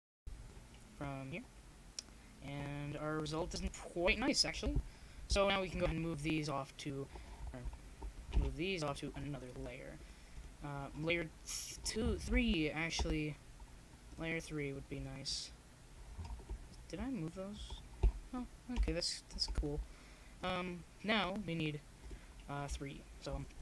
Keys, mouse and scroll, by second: 1.2-2.9 drag, 4.8 middle click, 5.8-7.4 middle drag, 8.0 m, 10.4 ctrl+z, 11.3 m, 13.4-16.3 drag, 16.3 ,, 17.0 m, 17.3 click, 17.4-19.4 middle drag, 19.4-21.2 drag, 21.2 middle click.